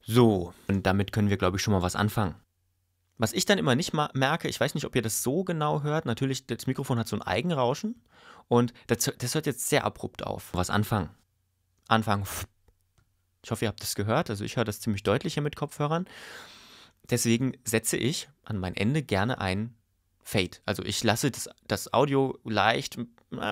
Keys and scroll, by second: 0.6 space, 3.2 space, 10.5 space, 11.8 space.